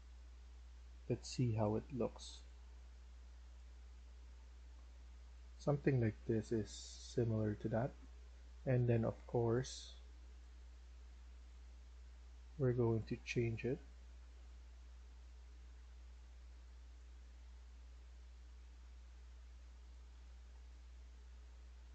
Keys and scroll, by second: 6.0 w, 6.3 q, 6.8 w, 7.4 s, 19.6-21.1 typing.